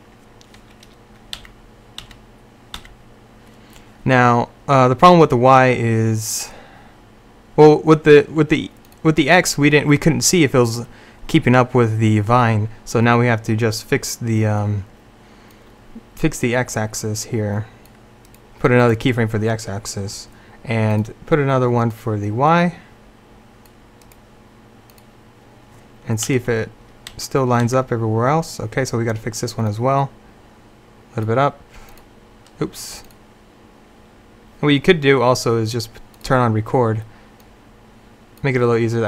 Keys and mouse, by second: 1.4 Right, 2.1 Right, 2.9 Right, 8.9-10.8 drag, 15.6-20.5 drag, 21.0-26.4 drag, 26.4 Left, 27.2 Right, 27.7 Right.